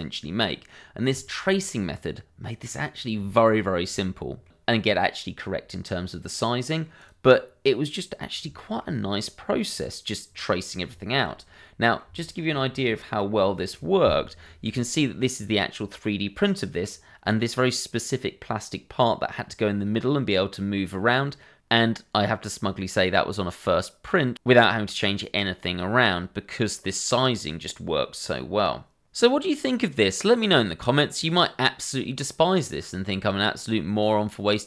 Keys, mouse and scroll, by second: 0.8 scroll down 1, 1.5 scroll up 1, 1.8 middle click, 3.2 shift+middle click, 3.8 middle click, 6.8 middle click, 8.8-9.2 scroll up 1, 9.2 click, 11.4-11.8 scroll down 1, 11.8 middle click, 15.2 scroll up 1.